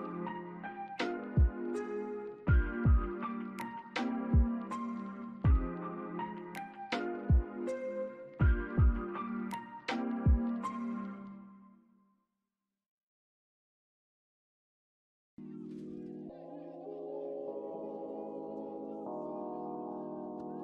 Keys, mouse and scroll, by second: 0.7 double click, 2.9 typing, 3.0 Return, 4.2 alt+middle click, 4.5 alt+click, 5.2 alt+middle click, 5.6 alt+click, 6.3-6.7 scroll up 1, 7.4 alt+click, 8.0 alt+middle click, 8.6 alt+scroll up 1, 9.4 alt+middle click, 10.5 alt+click, 11.6 alt+middle click, 11.9 alt+click, 12.9 right click, 17.6 double click.